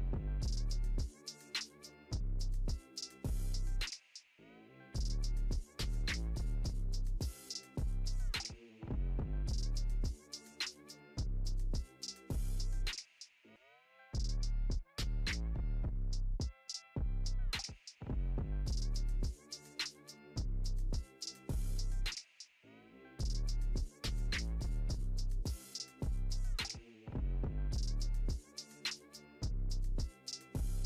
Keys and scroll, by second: 3.1 ctrl+t.